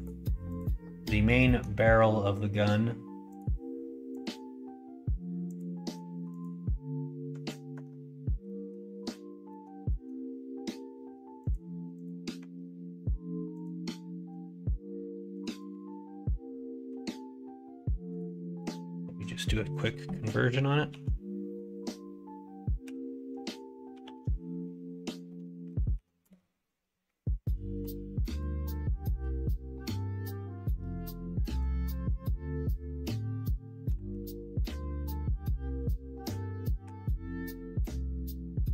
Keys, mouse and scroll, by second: 1.3 middle click, 3.3 click, 4.0 click, 5.5 click, 6.2 click, 8.4 middle click, 9.4 middle click, 9.8 middle click, 11.9 click, 12.3 Tab, 13.5 click, 15.5-28.3 drag, 31.6-38.7 drag.